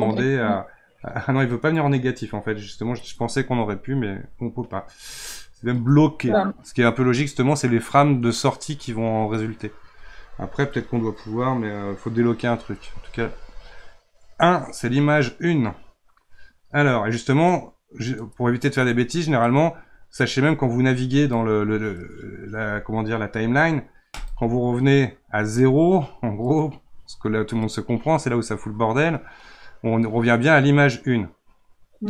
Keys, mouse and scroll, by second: 0.1-1.6 drag, 17.5-22.6 drag, 24.1 click.